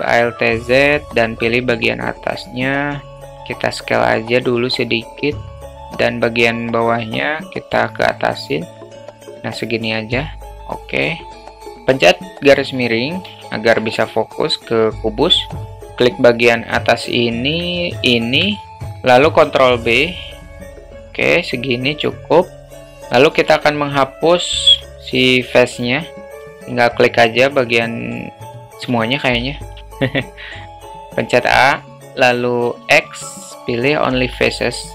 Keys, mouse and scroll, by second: 0.1 alt+z, 0.9 click, 3.5 s, 5.7 click, 7.4-9.5 drag, 9.8 s, 11.3 middle drag, 12.7 /, 13.3 space, 15.5 click, 17.3 middle click, 18.0 shift+click, 19.4 ctrl+b, 22.5 alt+middle click, 23.5 alt+z, 24.7 3, 25.7 alt+middle click, 26.3 middle click, 27.5 middle click, 28.9 a, 29.4 a, 29.9-31.5 alt+middle drag, 32.8 x, 34.6 alt+middle click.